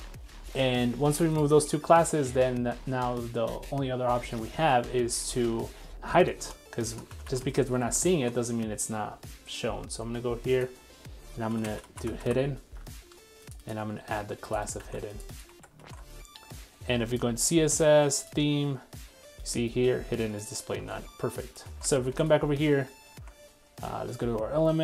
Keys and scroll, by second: 7.3 super+c, 14.8 super+c, 15.6 super+v, 15.8 super+s, 20.8 super+w, 21.7 super+s.